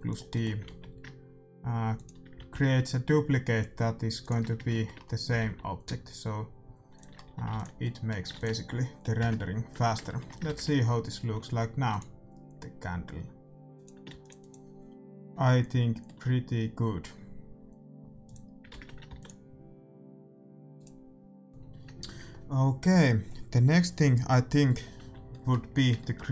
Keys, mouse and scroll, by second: 0.3-1.8 middle drag, 0.6 alt+d, 2.3 alt+d, 4.6 middle click, 5.3 alt+d, 7.2 a, 7.4 ctrl+s, 7.8-10.2 middle drag, 8.3 ctrl+s, 9.1 KP_0, 11.8 shift+z, 11.9-16.4 drag, 14.2 ctrl+s, 15.6-17.3 middle drag, 18.4-20.0 drag, 18.9 shift+z, 19.0 ctrl+s, 20.1 click, 25.2-26.3 middle drag.